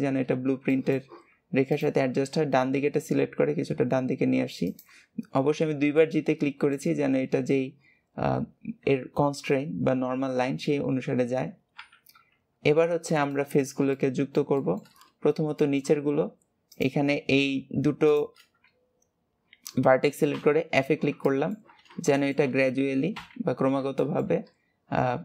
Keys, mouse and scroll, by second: 0.6-1.6 shift+middle drag, 1.6 click, 5.9-7.0 middle drag, 7.0-8.2 scroll down 2, 11.7 KP_3, 13.2-15.2 shift+middle drag, 15.2-15.5 scroll down 1, 15.5 shift+middle click, 16.0-16.6 scroll up 1, 16.6 click, 18.0 shift+click, 20.2 f, 21.2 shift+middle click, 21.7 scroll down 2, 22.0 shift+middle click, 22.4 f, 24.0 shift+middle click, 24.4 scroll up 1.